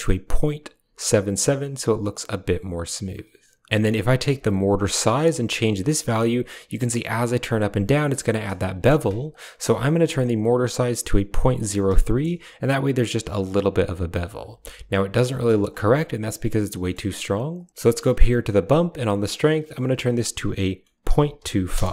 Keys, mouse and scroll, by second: 4.3-8.2 shift+drag, 8.3 click, 11.9 shift+middle click, 15.2 shift+middle click, 16.6 middle click, 17.7 middle click, 18.4 drag, 19.1-21.6 drag.